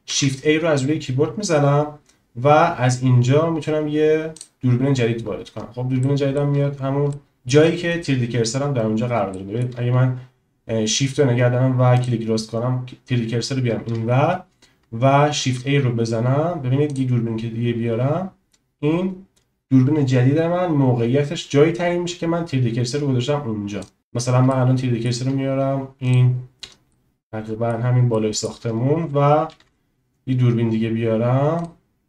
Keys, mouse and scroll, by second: 0.0 shift+a, 6.1 shift+middle click, 7.1-7.5 shift+middle drag, 9.3 shift+middle click, 12.1 shift+right click, 15.3 shift+a, 24.5-25.0 shift+middle drag, 26.1 shift+click, 26.9-27.7 middle drag, 28.1 shift+middle click, 29.4 shift+a.